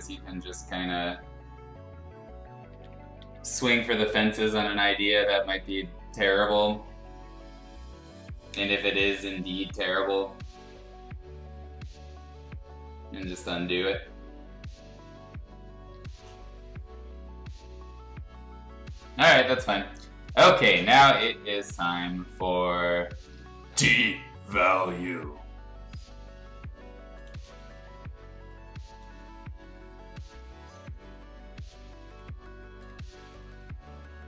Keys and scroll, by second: 2.4-3.7 typing, 4.7-6.8 typing, 8.5 ], 9.0 ], 9.3 ], 9.6 ].